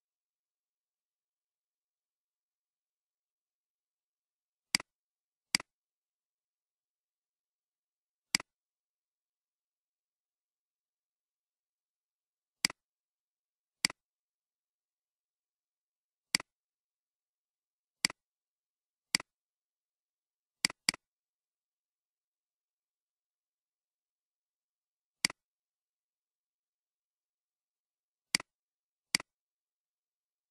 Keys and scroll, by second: 22.8-23.3 typing, 23.3 Return.